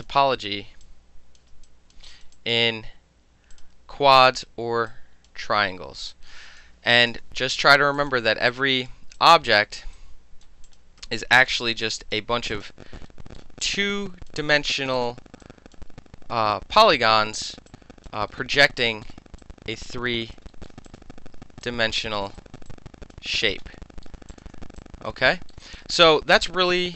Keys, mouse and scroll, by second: 0.3-0.9 middle drag, 0.9 alt+click, 1.4 alt+middle click, 1.7 alt+click, 2.0 alt+middle click, 2.1 alt+right click, 2.3 alt+middle click, 2.4 alt+click, 2.6 alt+middle click, 3.6 click, 4.9 click, 6.2 click, 7.2 KP_Enter, 8.0 click, 8.6 alt+click, 9.2 alt+click, 10.0-10.5 alt+right drag, 10.7 alt+click, 11.2 alt+click, 11.7 alt+middle click, 11.9 alt+click, 12.2 alt+middle click, 12.6 click, 12.7 alt+middle click, 13.1 alt+scroll up 2, 13.4 alt+middle click, 13.7 alt+click, 14.3 alt+middle click, 15.0 click, 15.1 alt+middle click, 15.5 alt+click, 15.8-16.4 alt+middle drag, 16.6-17.7 alt+middle drag, 17.7 alt+click, 18.1 alt+middle click, 18.6 alt+middle click, 19.1 alt+middle click, 19.5 alt+click, 20.4 alt+middle click, 20.7 alt+middle click, 20.9 click, 21.3 f, 21.7 alt+click, 22.4 alt+middle click, 22.5 alt+click, 22.7 alt+click, 23.2-23.8 alt+middle drag, 23.8 scroll up 2, 24.1 alt+middle click, 24.4 click, 24.5 alt+middle click, 24.8 alt+click, 25.1 alt+middle click, 25.7 alt+click, 25.8 alt+middle click, 26.0 alt+click, 26.4 alt+middle click.